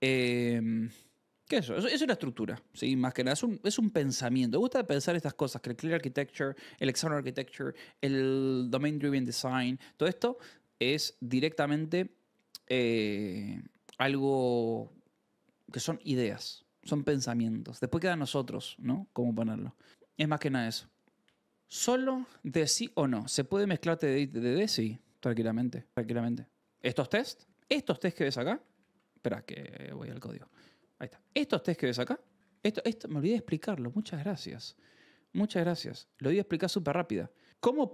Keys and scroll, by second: 27.2-29.2 typing, 30.5 Tab, 30.8-32.5 typing.